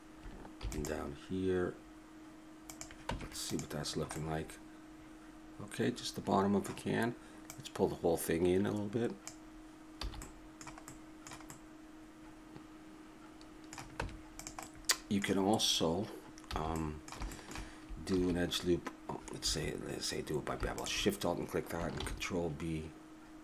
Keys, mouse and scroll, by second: 0.6 ctrl+r, 3.1 Tab, 5.2-6.3 middle drag, 7.5-9.4 drag, 10.0 a, 10.2-11.5 middle drag, 14.0 Tab, 16.5 a, 18.1 ctrl+r, 20.7-23.4 drag, 22.0 ctrl+b.